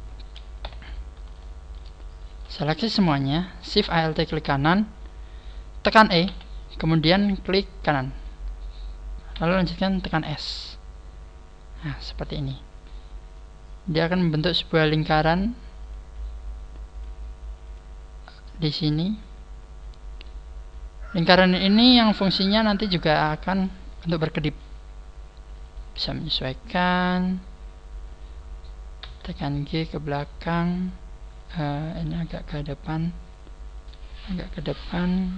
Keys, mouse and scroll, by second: 0.6 t, 1.3 shift+middle click, 1.7 shift+middle click, 2.3 a, 3.9 alt+shift+right click, 7.8 e, 7.9 right click, 9.3 s, 12.5 click, 14.9 click, 15.9 click, 16.9 click, 22.1 middle click, 24.1 KP_1, 25.7 right click, 26.3 scroll up 1, 26.9-27.5 scroll up 3, 29.0 g, 32.1 g, 33.3 click, 33.8 right click, 33.9 g, 34.5 click, 35.1 right click.